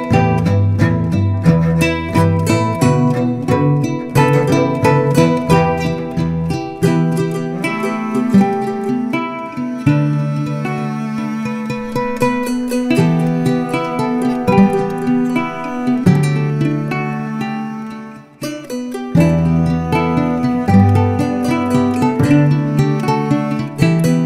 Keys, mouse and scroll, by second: 0.6 click, 4.3-4.7 scroll down 3, 4.7 shift+middle click, 5.1-5.6 scroll up 1, 5.6 click, 6.0 x, 6.1 scroll down 1, 6.2 shift+middle click, 6.7 scroll up 4, 6.8 click, 7.2 x, 7.3 shift+middle click, 7.4 click, 8.1 x, 8.2 scroll down 4, 8.3 shift+middle click, 8.4 scroll up 2, 8.5 click, 8.7 l, 8.9 shift+click, 9.3 Tab, 9.4 scroll down 6, 9.6 shift+middle click, 10.2 click, 10.4 scroll up 6, 11.4 x, 11.4 scroll down 2, 11.6 scroll up 3, 11.7 click, 11.9 x, 12.0 click, 12.1 scroll down 4, 12.2 shift+middle click, 12.3 shift+middle click, 12.4 scroll up 1, 12.5 click, 12.7 x, 12.8 shift+middle click, 13.0 click, 13.2 scroll down 6, 13.3 shift+middle click, 13.4 shift+scroll up 3, 13.7 shift+middle click, 13.8 click, 13.9 x, 14.2 click, 14.4 x, 14.5-14.8 scroll down 6, 14.5 shift+middle click, 14.8 click, 15.0 scroll up 3, 15.0 shift+middle click, 15.2 click, 15.4 x, 15.6 ctrl+z, 15.8 click, 15.9 middle click, 15.9 x, 16.1 shift+middle click, 16.5 scroll up 4, 16.6 click, 17.0 shift+middle click, 17.4 scroll down 4, 17.5 scroll up 1, 17.9 scroll down 1, 18.1 scroll up 2, 18.2 shift+middle click, 18.3 click, 18.5 x, 18.6 scroll down 2, 18.6 shift+middle click, 18.9-20.1 drag, 20.1-22.0 shift+middle drag, 22.0-24.2 drag.